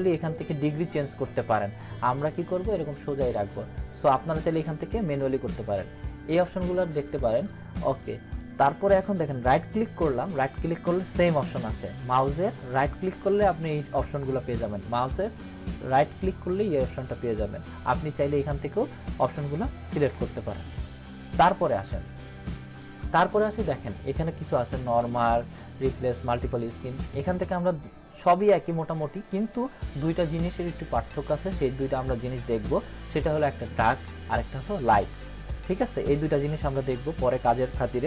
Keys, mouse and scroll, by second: 1.8-3.7 drag, 7.2 click, 9.5 right click, 12.6 right click, 15.9 right click.